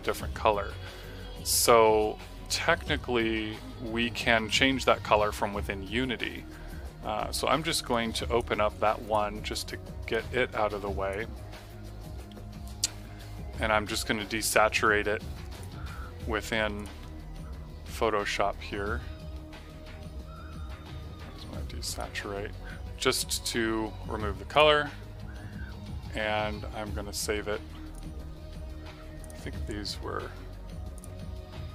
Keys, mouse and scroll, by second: 7.8 click, 15.5 click, 21.8 click, 24.4 click, 27.8 click.